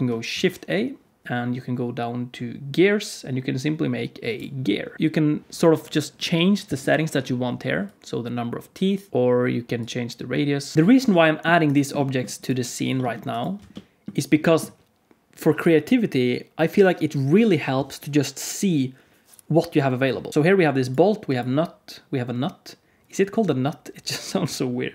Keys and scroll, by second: 0.2 shift+a, 10.7 alt+a, 12.8 g, 13.5 alt+a, 20.3 alt+a.